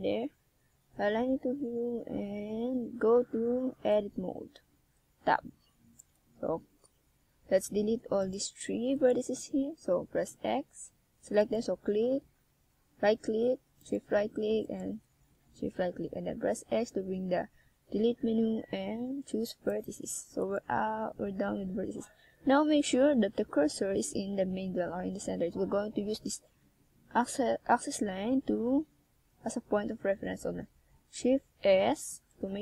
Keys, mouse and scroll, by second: 0.8 click, 1.6 e, 4.6 click, 5.1 e, 7.0 click, 7.3 e, 8.8 click, 9.1 e, 10.8 click, 11.1 e, 13.0 click, 13.3 e, 15.0 click, 15.1 e, 17.1 click, 17.2 e, 19.4 e, 21.3 click, 21.8 e, 23.8 click, 24.0 e, 26.9 click, 28.1 right click, 28.9 g, 30.1 g, 31.3 click, 31.7 right click, 32.0 g.